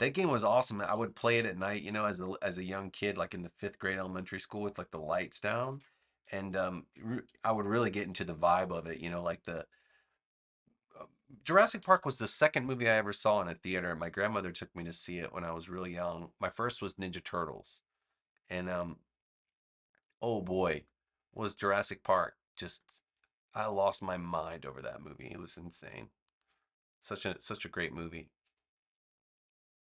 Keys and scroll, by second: 0.2 super+z, 0.7 super+z, 3.8 v, 5.6 super+c, 6.8 super+v, 8.5 a, 11.7 super+=.